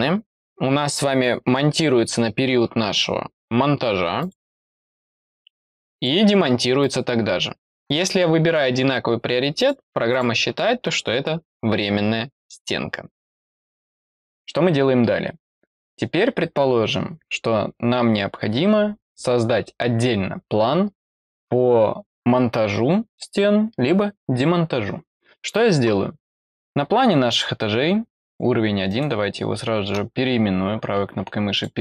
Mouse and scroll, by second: 4.1 click, 5.0 click, 5.9 click, 6.7 click, 9.5 click, 10.0 click, 27.2 click, 28.1 click, 28.8 right click, 31.5 click.